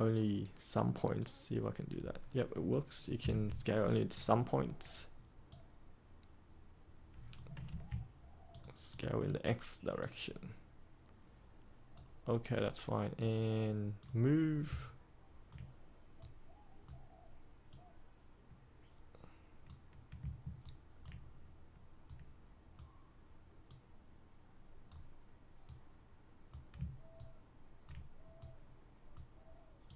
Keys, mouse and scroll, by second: 3.2 ctrl+z, 4.1-7.5 drag, 7.6 ctrl+z, 8.5-12.5 drag, 14.8 ctrl+right click, 16.1-17.6 right drag, 17.6 click, 20.5 ctrl+right click, 22.0 right click, 23.6 click, 25.6-26.7 right drag, 27.1 ctrl+right click, 28.3-29.8 right drag.